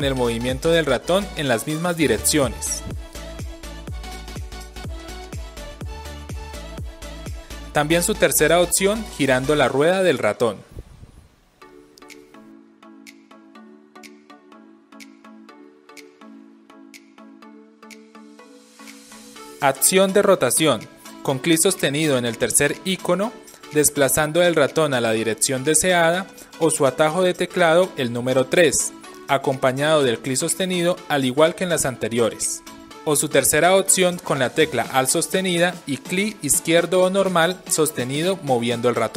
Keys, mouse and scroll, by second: 9.7-20.1 middle drag, 20.1 click, 20.6-21.8 right drag, 21.8-27.9 drag, 27.9-31.6 right drag, 28.7 3, 31.5 3, 31.6-33.5 drag, 33.5-34.1 right drag, 34.1-39.1 alt+drag.